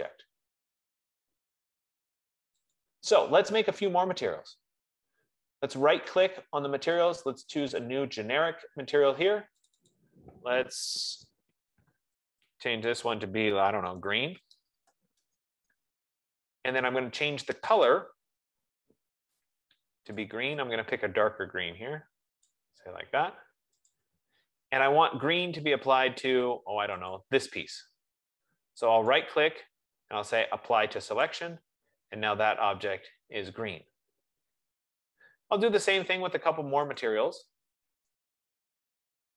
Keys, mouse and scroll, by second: 3.3 click, 6.4 right click, 8.2 click, 10.0 click, 10.2 click, 12.5 ctrl+a, 14.1-15.7 typing, 17.2-18.0 typing, 18.2 click, 20.5 click, 22.6 click, 24.2 click, 27.5 click, 29.6 right click, 31.6 click, 37.4 right click.